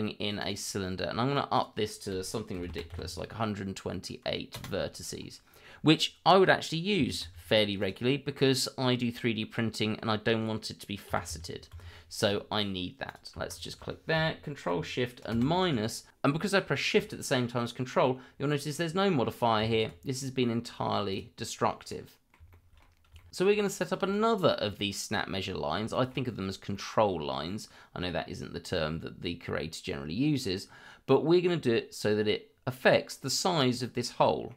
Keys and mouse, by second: 1.5-4.6 drag, 7.8 click, 9.4-9.9 middle drag, 13.0 click, 13.5 shift+click, 15.4 ctrl+shift+KP_Subtract, 20.2 middle click, 21.1 click, 21.9-22.3 middle drag, 22.5-22.8 shift+middle drag, 23.2 shift+middle drag, 23.4-24.1 middle drag, 25.6 shift+middle drag, 26.6-27.1 middle drag, 27.2 shift+middle click, 27.8-28.3 middle drag, 29.3 middle click, 30.6-31.3 middle drag, 32.7-33.1 middle drag, 34.0-34.5 middle drag.